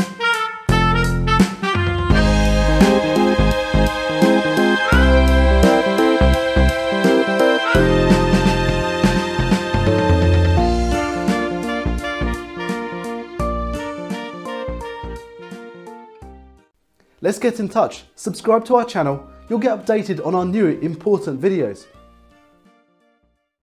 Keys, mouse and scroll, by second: 2.7 click, 3.9 click, 6.0 F5.